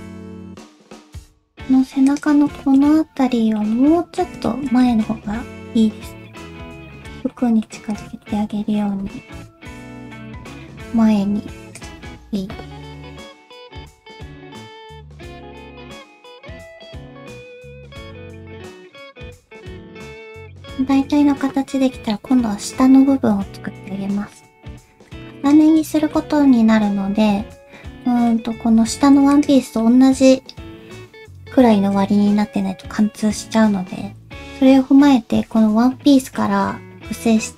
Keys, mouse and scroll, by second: 0.7 shift+middle click, 0.7 scroll up 3, 1.5 Tab, 2.0 click, 2.5 shift+middle click, 2.9 middle click, 3.7 middle click, 4.4 shift+middle click, 4.8 middle click, 5.2 g, 7.3 middle click, 7.9 click, 8.2 middle click, 8.8 middle click, 9.6 click, 10.0 shift+middle click, 10.3 middle click, 10.8 g, 12.0 middle click, 12.9 alt+z, 13.2 click, 13.4 alt+z, 13.4 middle click, 13.7 g, 14.3 click, 14.5 g, 14.8 middle click, 15.0 click, 15.1 g, 15.6 middle click, 16.3 click, 16.4 middle click, 16.6 shift+middle click, 16.8 g, 17.3 alt+z, 17.5 click, 17.6 alt+z, 17.8 g, 18.2 scroll down 1, 18.3 middle click, 18.6 middle click, 18.9 alt+z, 19.0-19.5 scroll down 1, 19.5 middle click, 19.6 shift+middle click, 19.8 alt+z, 19.8 alt+z, 19.9 middle click, 20.1 scroll up 2, 20.3 shift+middle click, 20.7 Tab, 23.7 middle click, 24.5 shift+scroll down 1, 24.7 shift+middle click, 25.4 click, 26.0 shift+middle click, 27.1 Tab, 28.0 middle click, 28.7 3, 29.3 alt+click, 29.8 middle click, 36.4 middle click.